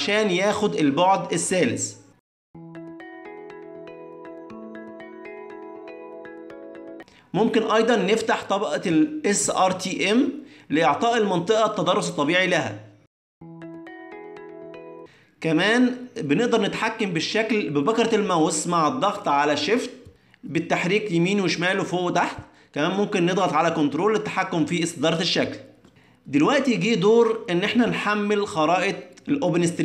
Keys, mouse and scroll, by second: 5.1 click, 5.5 click, 7.6 click, 18.5 middle click, 21.4 shift+middle click, 22.3 shift+middle click, 24.9 shift+middle click, 25.7 shift+middle click, 26.2 ctrl+middle click, 26.8 middle click, 27.4 shift+middle click, 27.8 ctrl+middle click.